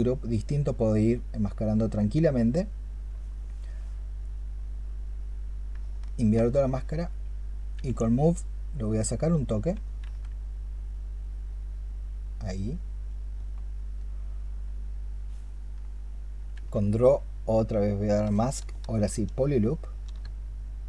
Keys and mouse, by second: 6.5 ctrl+click, 7.7 w, 9.9 ctrl+z, 16.4 q, 18.2-19.9 space.